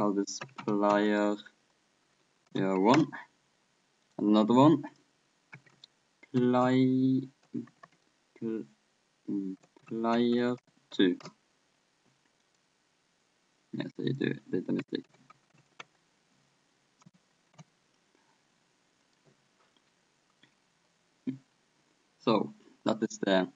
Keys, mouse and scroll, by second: 4.1-6.1 right drag, 4.9-6.8 drag, 7.7 BackSpace, 12.5-14.5 right drag, 14.1-15.8 drag, 19.1-20.7 right drag, 20.7-22.6 middle drag.